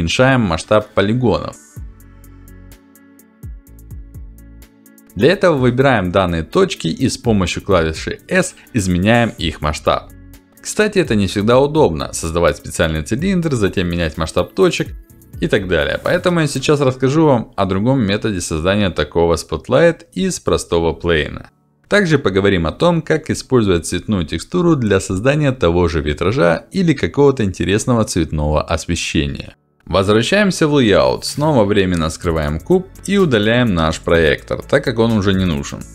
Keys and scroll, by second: 8.8 s, 18.4 s, 24.0 s.